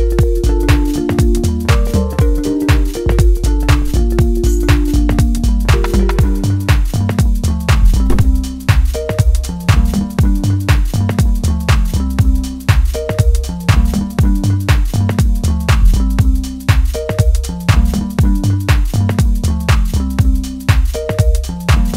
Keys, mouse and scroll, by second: 0.4 click, 2.3-5.1 middle drag, 5.1-5.5 scroll up 1, 5.5-7.6 middle drag, 7.6 click, 11.0-13.4 middle drag, 13.4 click, 16.6-20.9 drag, 20.9-21.9 drag.